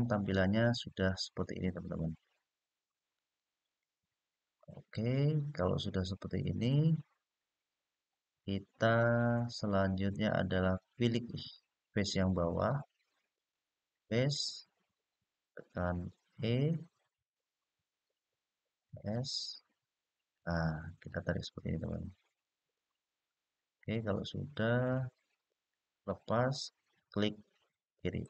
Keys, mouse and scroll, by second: 0.4-1.3 scroll up 2, 1.3-2.7 scroll down 1, 2.7-8.1 middle drag, 13.1 click, 16.1 e, 18.6-25.7 s, 28.0 click.